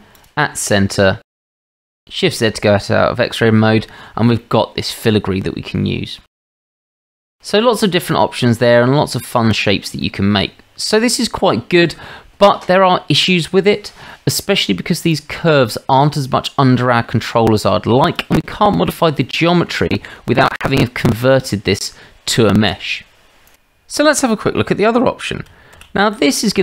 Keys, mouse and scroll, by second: 0.9 Tab, 1.7 shift+z, 4.4-6.2 middle drag, 7.0-7.7 middle drag, 10.0-10.4 middle drag, 14.1 shift+middle drag, 15.5-16.4 middle drag, 16.4-16.9 drag, 18.7-19.2 middle drag, 19.3-19.7 shift+middle drag, 25.8 shift+a.